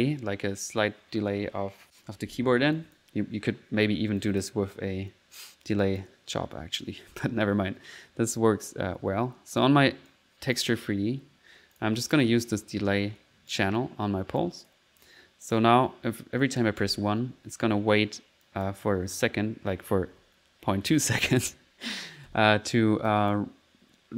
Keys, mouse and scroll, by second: 2.8 click, 3.4 middle click, 4.2 click, 5.5 middle click, 5.9 click, 9.6 click, 10.1 click, 11.0 middle click, 11.8 click, 12.0 click, 13.5-14.6 drag, 14.7 click, 15.5 click, 15.9 middle click, 16.5 click, 16.9 1, 18.5 click, 19.1 middle click, 22.3 1, 23.1 click.